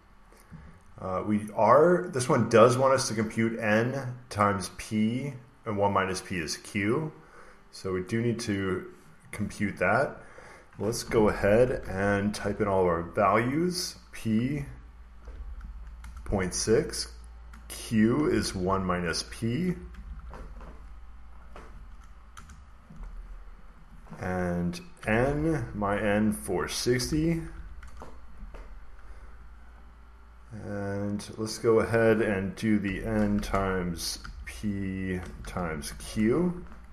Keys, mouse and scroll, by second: 3.4 click, 4.3 click, 5.7 click, 10.0 click, 10.4 click, 11.3-15.6 typing, 15.9 Return, 16.4 Left, 17.8-20.5 typing, 21.3 click, 22.1-23.3 drag, 22.3 Return, 23.6-25.7 drag, 24.6-27.9 typing, 29.7-31.8 drag, 31.9 click, 32.7 typing, 34.1-36.9 typing.